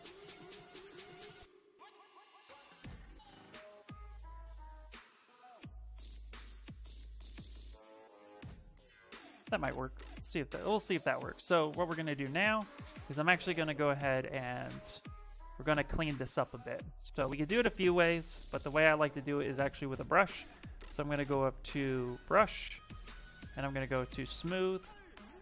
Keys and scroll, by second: 2.1 ctrl+w, 10.3 ctrl+z, 11.9 w, 13.2 q, 13.7 s, 18.8 ,.